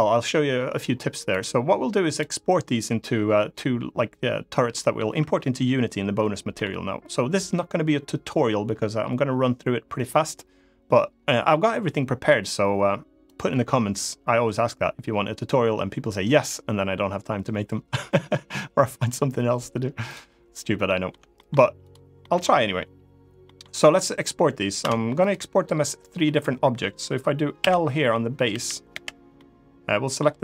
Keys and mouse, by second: 1.1 click, 1.8 click, 4.5 middle click, 6.2 middle click, 20.7 middle click, 21.1 shift+middle click, 21.6-21.9 drag, 21.9 middle click, 23.1 middle click, 24.5 Tab, 24.9 click, 25.9 middle click, 27.3 l, 28.2 l, 28.6 l, 29.1-30.2 middle drag.